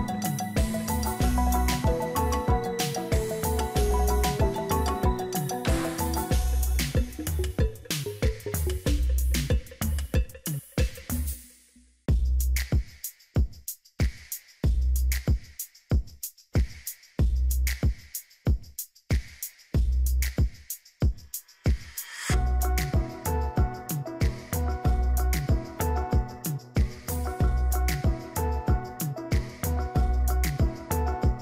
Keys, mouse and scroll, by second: 0.1 click, 6.0 double click, 9.6 ctrl+-, 9.9 ctrl+-, 16.4 ctrl+z.